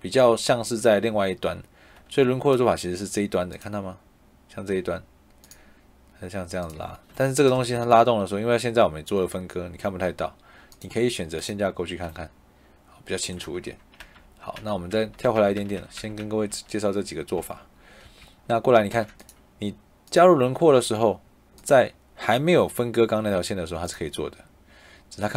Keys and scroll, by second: 7.4 Escape, 13.9 ctrl+z, 17.9 Escape, 18.8 Tab.